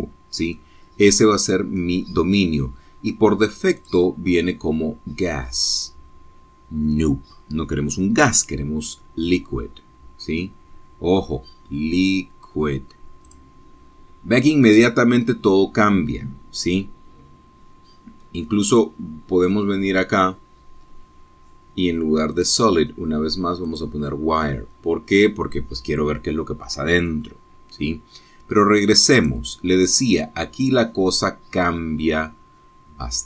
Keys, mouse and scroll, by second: 1.6-3.0 middle drag, 4.9 click, 14.4 click, 19.8 click, 21.3-22.0 scroll down 2, 23.4 click, 24.8 click, 30.3 click, 31.6-32.4 scroll down 3.